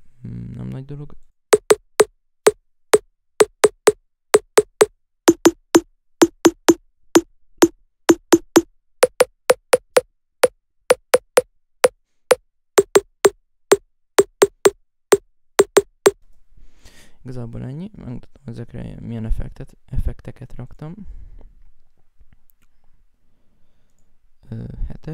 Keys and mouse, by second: 0.9 right click, 16.9 F1, 17.5 F1, 20.0 alt+F8, 20.0 right click, 20.3 F7, 20.4 F6, 20.8 right click, 21.2 Up, 22.9-25.1 right drag.